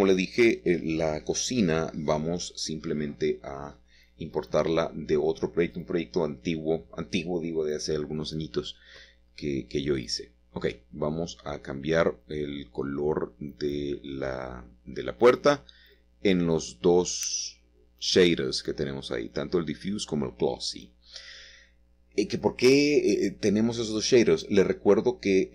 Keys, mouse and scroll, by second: 0.4-1.1 scroll up 1, 1.1-2.2 scroll up 1, 2.2-3.2 scroll down 3, 2.8 middle click, 3.2 middle click, 3.8 middle click, 4.1 click, 5.8-8.6 drag, 8.1-9.4 scroll down 1, 11.0 ctrl+c, 11.5-12.6 middle drag, 14.4-15.6 scroll down 1, 15.7-16.1 scroll down 1, 16.1 shift+middle click, 19.5-19.8 scroll up 2, 20.3-21.6 shift+middle drag, 22.2 click, 24.5 click.